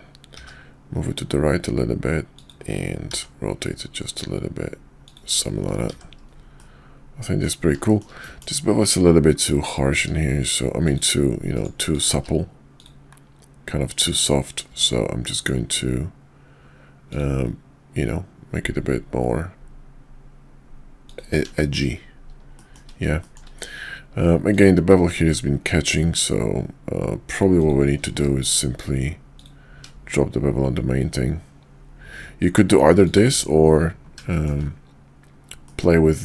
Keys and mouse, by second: 0.3 g, 3.1 r, 5.9 shift+2, 6.6-7.5 middle drag, 7.9 middle click, 8.2 middle click, 10.0 q, 12.1 q, 21.6 shift+middle drag, 22.6 shift+middle drag, 23.2 shift+middle click, 24.4 click, 24.9 q, 27.5 click, 28.0 q, 34.3 shift+middle drag, 35.7-36.2 middle drag.